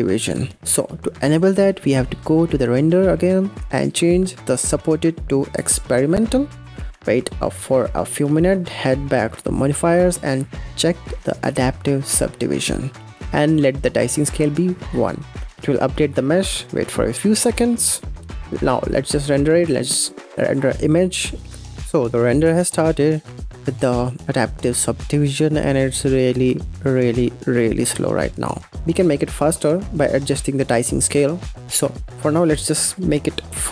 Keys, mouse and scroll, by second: 1.7 click, 4.4-6.9 drag, 9.4 click, 12.2 click, 15.5 scroll down 1, 18.7-21.7 drag, 31.6-33.7 drag.